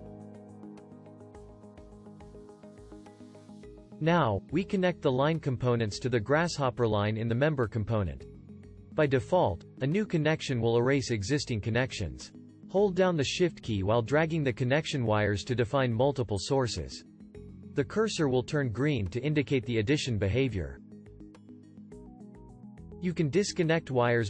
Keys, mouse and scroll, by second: 13.3-15.8 shift+drag, 18.2 click.